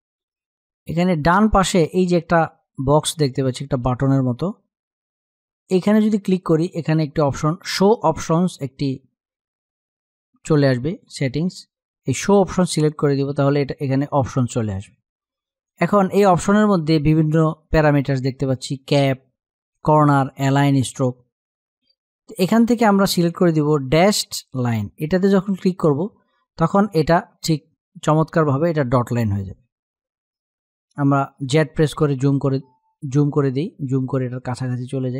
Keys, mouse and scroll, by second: 11.9 click, 24.7 click, 31.2 z, 32.1 click, 32.5 z, 33.1 click, 34.3 space, 34.5 click, 34.8 space, 35.1 click.